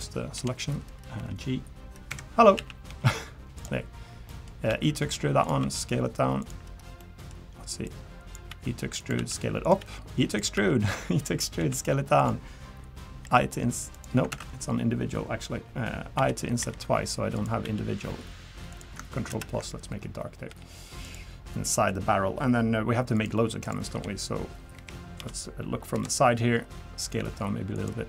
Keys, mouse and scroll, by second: 0.3 l, 1.2 g, 2.1 Escape, 2.5 a, 2.9 g, 4.3 middle click, 4.7 e, 5.6 s, 7.0 middle click, 7.8 click, 8.5 e, 9.1 s, 9.8 e, 10.5 e, 11.6 s, 13.2 i, 14.3 ctrl+z, 16.1 i, 17.6 e, 19.3 ctrl+KP_Add, 20.5 g, 21.4 scroll down 2, 21.6 middle click, 22.0-22.3 scroll up 2, 23.1 click, 23.6 click, 23.9 l, 24.7 KP_1, 25.2 KP_7, 25.9 KP_3, 27.2 s.